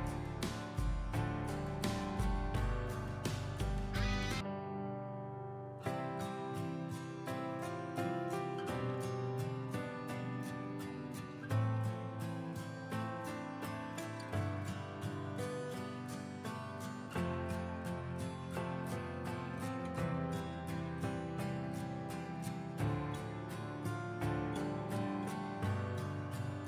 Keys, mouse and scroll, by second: 12.5 click, 13.1 alt+scroll down 1, 13.7 alt+scroll up 2, 15.3 click, 19.3 ctrl+alt+shift+e, 21.1-26.6 drag.